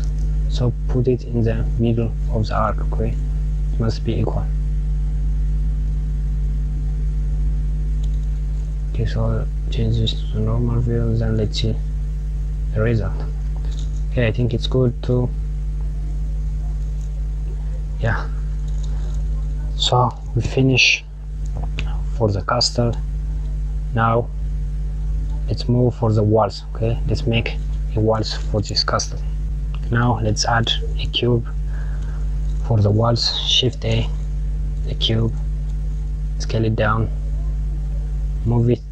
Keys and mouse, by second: 10.6 click, 12.8 KP_Subtract, 14.5 click, 17.7 KP_Subtract, 19.7 click, 29.8 click, 31.7 KP_Subtract, 32.8 shift+a.